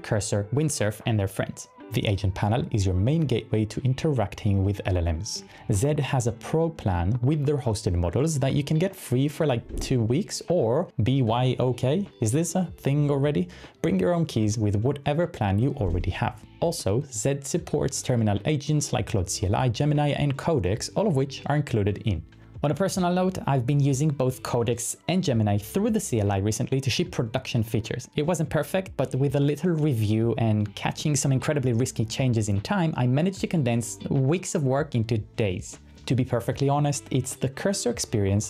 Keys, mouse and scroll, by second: 5.5-9.5 typing, 38.0-38.4 typing.